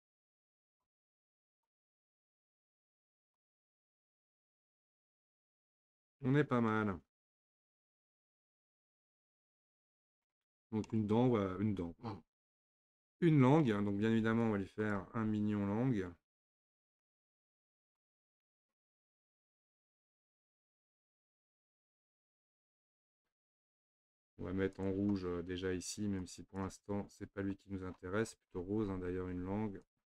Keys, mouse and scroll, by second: 0.3 scroll up 1, 0.5 click, 1.1 click, 1.5 click, 2.0 click, 3.2 click, 3.8-6.8 middle drag, 7.2 scroll up 1, 7.3-7.7 scroll down 2, 7.7-10.7 middle drag, 10.7-11.4 scroll down 1, 11.4-12.5 scroll up 1, 12.5 Tab, 12.9-14.8 middle drag, 14.8 click, 16.8-20.9 drag, 24.7 click, 27.9-29.9 scroll down 25, 29.9 click.